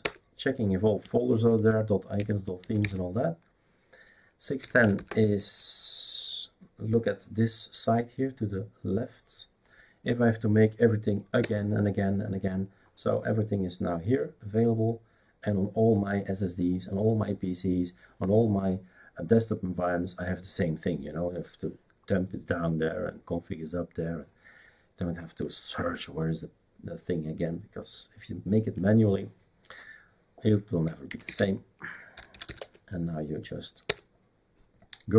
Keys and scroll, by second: 0.0 Return, 2.6 typing, 4.3-5.7 typing, 11.4 Return, 31.1-32.9 typing, 33.8 Return.